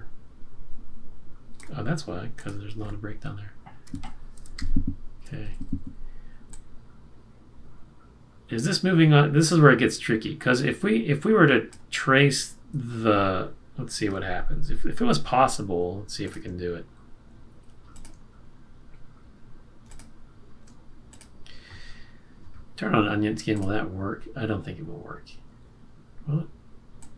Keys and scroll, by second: 3.8 F6, 4.5 F6, 4.6 shift+Up, 5.4 Up, 5.6 Up, 5.8 Up.